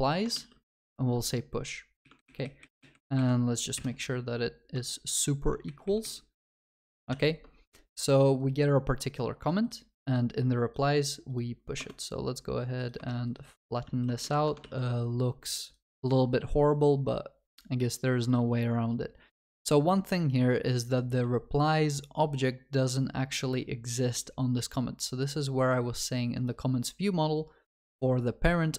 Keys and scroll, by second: 0.4 ctrl+s, 7.2 ctrl+s, 13.9 ctrl+s, 14.3 ctrl+alt+shift+l.